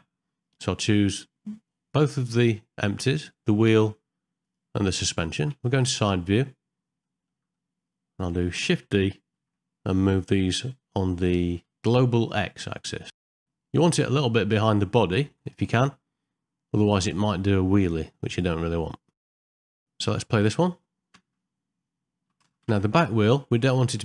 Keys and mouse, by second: 3.2 shift+click, 4.4 shift+click, 5.8 KP_1, 7.1 middle click, 7.6 middle click, 9.4 shift+d, 19.1 middle click, 19.3 ctrl+middle click, 19.4 shift+middle click, 19.5 middle click, 19.6 shift+middle click, 19.8 ctrl+middle click, 20.3 middle click, 21.2 space, 22.7 shift+Left, 23.7 middle click.